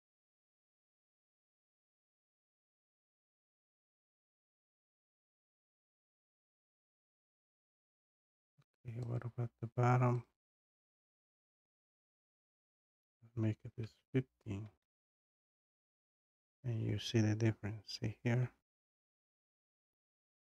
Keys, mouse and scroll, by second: 0.3-0.8 scroll, 2.2 click, 2.4 click, 7.5 click, 9.2 click, 10.3 click, 10.5 click, 12.9 click, 13.8-15.2 typing, 16.1 click, 17.9-18.2 scroll down 2, 18.5-18.8 scroll down 1.